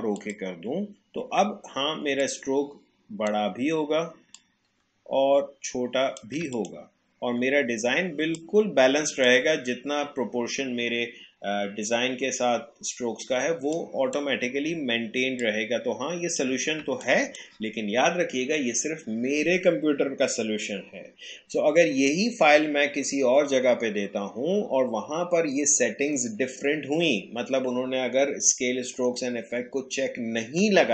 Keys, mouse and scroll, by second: 8.3 space, 8.4 click, 8.7 space, 13.7-15.4 drag, 16.8 space, 17.0 click, 17.3 space.